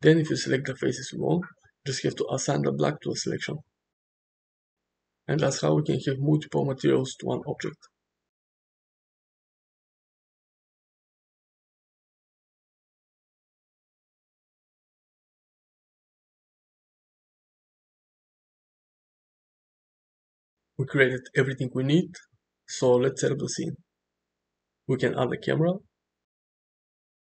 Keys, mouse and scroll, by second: 0.8 3, 1.1 click, 2.0 shift+click, 3.1-4.5 middle drag, 5.6 shift+click, 6.2-7.9 middle drag, 10.4 click, 11.6 click, 12.1 Tab, 12.7-13.3 middle drag, 13.7 middle drag, 18.3-18.9 middle drag, 19.5-21.0 middle drag, 21.4-24.1 middle drag, 24.6 shift+a.